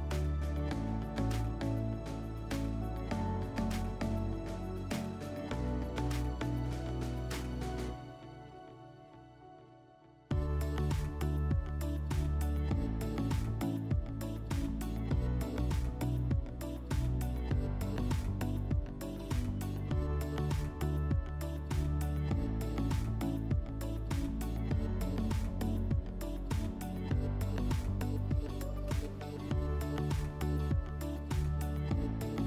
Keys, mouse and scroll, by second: 0.7-3.5 drag, 6.2-7.9 drag, 10.0 click, 11.6 r, 12.8 e, 16.3-17.7 drag, 17.8 ctrl+z, 18.8 r, 22.1-24.1 drag, 24.1 click, 26.2-28.5 drag, 29.3 click, 30.2 w, 31.3 ctrl+z.